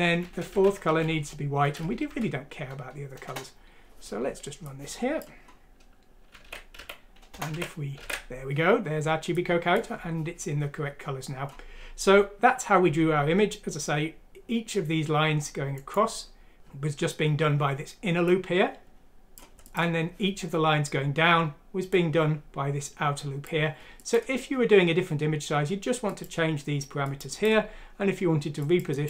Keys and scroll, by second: 0.0-1.4 typing, 0.4 Delete, 2.0 F6, 3.2 Return, 6.6 alt+w, 6.7 alt+w, 7.3 Return, 7.5 alt+w.